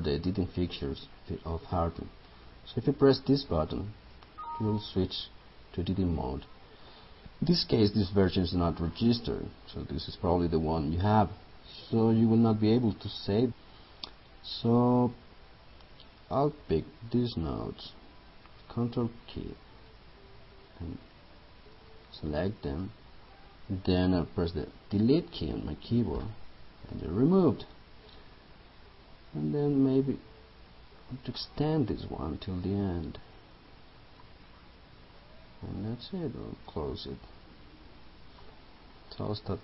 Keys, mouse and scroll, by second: 19.8 ctrl+click, 20.7 ctrl+click, 21.8 ctrl+click, 22.6 ctrl+click, 26.3 Delete, 30.0-35.0 drag, 38.5 Left.